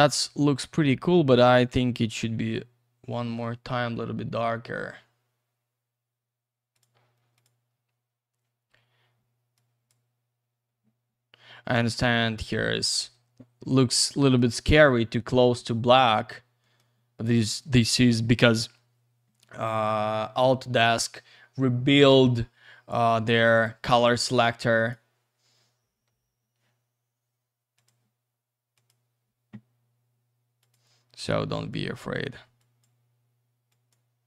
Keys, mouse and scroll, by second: 3.6-4.7 scroll up 1, 4.7 scroll down 1, 6.7 click, 7.4 click, 9.6 click, 11.7 click, 14.4 click, 16.6 middle click, 23.1 click, 24.7 click, 27.7 click, 28.8 click, 30.6 click, 31.5 click, 32.6 click, 33.7 click.